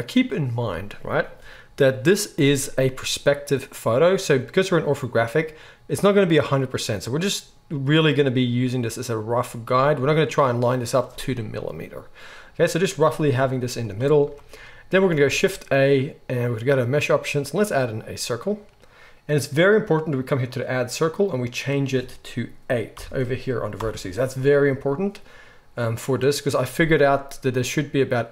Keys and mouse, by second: 0.7-7.3 middle drag, 13.2 g, 15.3 shift+a, 20.5-28.3 drag.